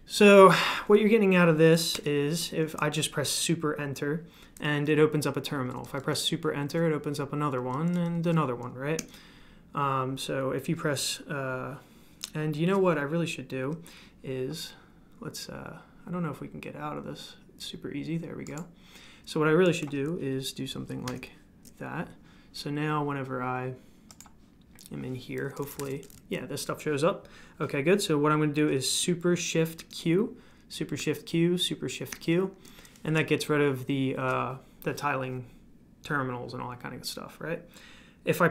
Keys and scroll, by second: 25.4-26.3 typing, 29.8 super+q, 31.0 super+q, 32.1 super+q.